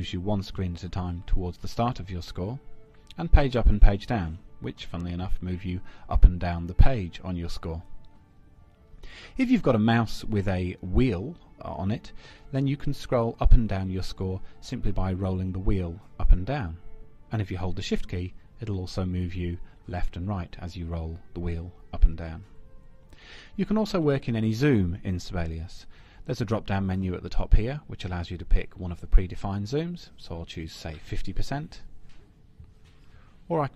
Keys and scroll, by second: 3.9 Page_Down, 5.2 Page_Up.